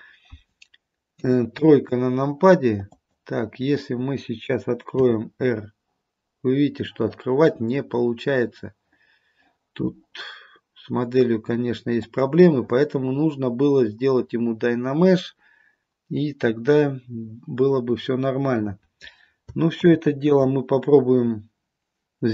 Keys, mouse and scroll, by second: 1.2 KP_3, 3.0 click, 5.1 r, 19.9 ctrl+z.